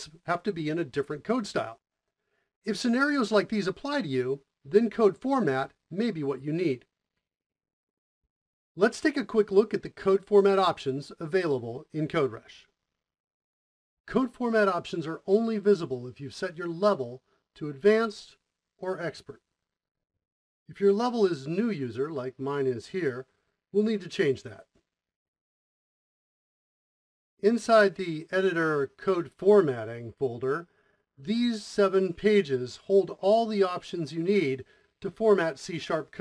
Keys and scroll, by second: 8.3 Return, 8.3 o.